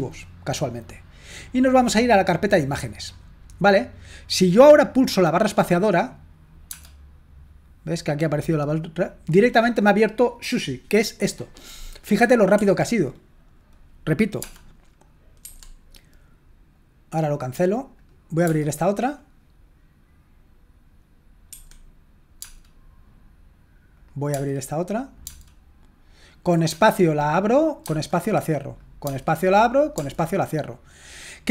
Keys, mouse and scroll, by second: 2.4 click, 3.8 click, 12.6 Escape, 15.4 Escape, 17.3-21.5 drag, 21.5 Escape, 22.4 space, 23.9 click, 26.1 click, 26.9-27.8 typing, 28.7 click, 29.1-29.9 typing.